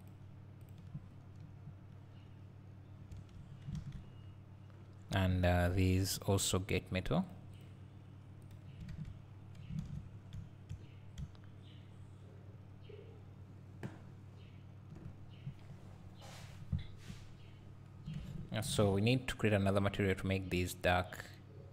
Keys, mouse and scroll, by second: 3.1 Tab, 3.3 Tab, 3.8 alt+a, 4.0-5.1 scroll down 2, 5.1 scroll up 1, 5.3 `, 6.3 click, 8.5-21.7 drag, 8.9 alt+a, 9.3-10.1 scroll down 2, 10.1 scroll down 1, 10.4 `, 10.8-11.2 scroll down 2, 11.2 `, 17.8-18.9 scroll up 1.